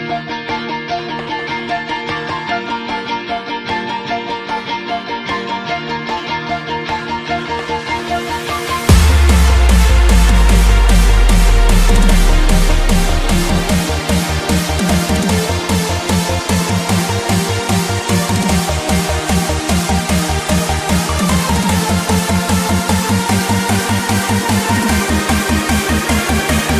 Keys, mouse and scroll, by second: 2.2 right click, 3.0 F10, 3.7 click, 4.6-5.9 typing, 6.5-8.5 drag, 9.0 shift+0, 9.3 Return, 10.7-16.1 drag, 16.6 ctrl+click, 17.4 ctrl+click, 18.5 shift+click, 19.4 shift+click, 20.2 ctrl+c, 20.4 ctrl+v, 21.1-26.7 drag.